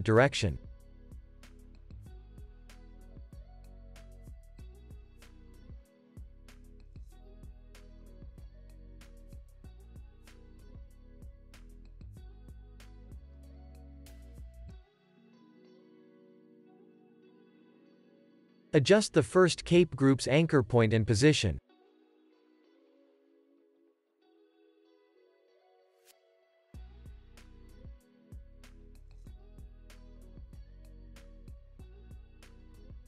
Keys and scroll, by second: 1.6 space, 6.5 space, 7.8 Up, 8.2 Down, 9.7 Up, 10.5 Up, 12.2 Down, 12.5 Up, 13.0 Down, 13.8 space, 17.2 space, 17.5 super+s, 18.8 super+s, 20.2 Tab, 22.8 Tab, 24.3 super+s, 26.0 super+z, 27.2 space, 30.8 space.